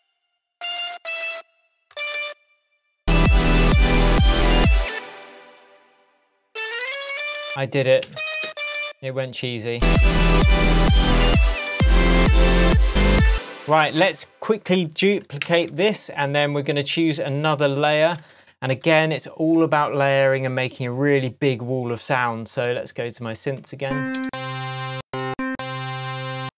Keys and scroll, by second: 2.1 alt+BackSpace, 4.9 space, 8.0 Up, 12.7 shift+Tab, 13.2 shift+space, 13.7 super+s, 15.4 super+d, 24.2 Up, 26.4 Up.